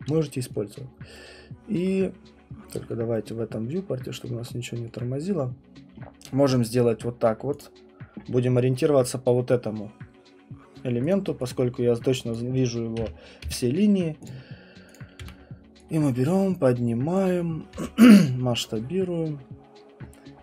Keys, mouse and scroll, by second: 1.8 alt+middle click, 2.9 alt+middle click, 5.0 alt+middle click, 7.6 click, 11.1 click, 11.5 click, 12.3 click, 13.0 8, 13.4 Return, 14.2 click, 14.9 click, 15.2 w, 17.2 click, 17.7 r, 18.6 click.